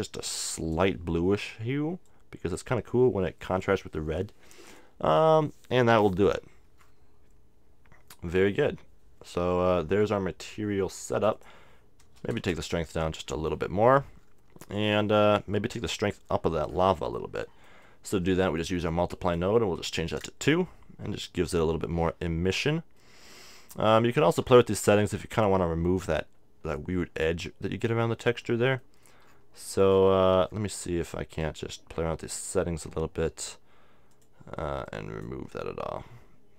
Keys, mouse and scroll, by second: 0.6-3.8 drag, 6.7-9.0 middle drag, 11.2-12.8 drag, 14.2-20.2 middle drag, 19.2-21.1 drag, 22.7-23.8 middle drag, 28.8-32.5 middle drag, 32.5-36.5 drag.